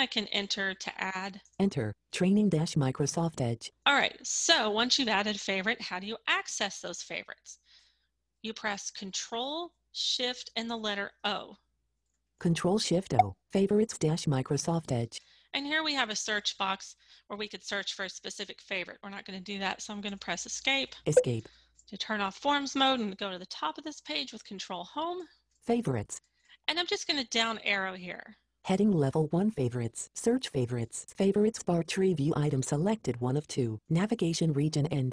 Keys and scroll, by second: 0.0 Return, 8.5-15.4 ctrl+shift+o, 24.2 ctrl+Home.